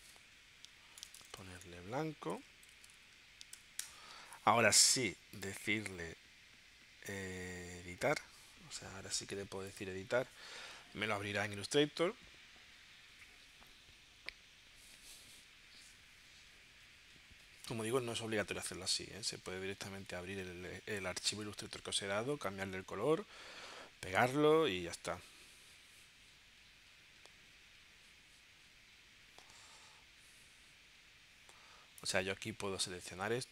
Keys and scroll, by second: 0.7 Right, 1.0 BackSpace, 2.3 shift+b, 2.7 l, 3.6 o, 3.8 Return.